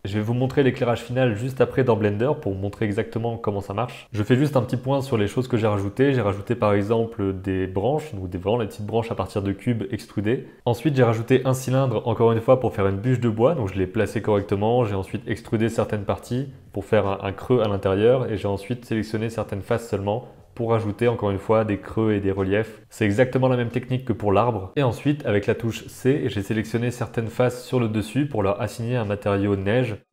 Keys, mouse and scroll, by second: 4.4 click, 5.0 g, 5.7 middle click, 5.9 shift+middle click, 6.1 middle click, 6.2 shift+middle click, 6.4 middle click, 6.6 shift+middle click, 7.1 shift+middle click, 7.2 middle click, 7.8-13.1 typing, 10.2 middle click, 10.5 Tab, 10.9 shift+middle click, 12.6 shift+middle click, 13.5 middle click, 13.8-14.2 drag, 14.4 g, 15.0 click, 15.5 middle click, 15.9-17.3 typing, 16.7 middle drag, 17.7 alt+Tab, 17.8 shift+click, 17.9 shift+click, 18.2 right click, 18.5 right click, 19.0 Tab, 19.1 Tab, 19.1 click, 19.4 g, 19.8 click, 19.9 g, 20.2 Tab, 20.3 middle click, 20.5 Tab, 20.6 click, 20.8 shift+click, 21.0 shift+click, 21.2 g, 21.6 Tab, 21.7-22.2 middle drag, 22.2 Tab, 23.0 shift+super+click, 23.3 g, 23.6 Tab, 23.7 middle click, 24.1 Tab, 24.2 click, 24.4 e, 24.6 s, 24.7 super+c, 25.9 middle click, 26.0 c, 27.7 middle click, 28.0 c, 28.2 click, 29.2 middle click, 29.4 Tab, 29.5 s, 29.5 g, 29.7 click, 29.7 g.